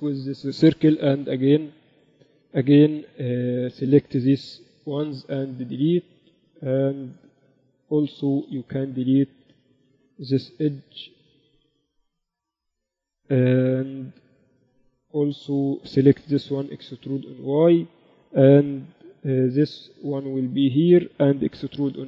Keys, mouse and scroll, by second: 0.9 a, 1.8 n, 2.0-3.5 drag, 3.3 n, 3.5 b, 5.1 x, 8.1 a, 8.2 a, 8.9 a, 9.1 b, 10.2 Escape, 10.3 a, 11.2 b, 12.3 x, 15.6 b, 17.0 e, 18.8 a, 19.7 b, 20.8-22.0 drag.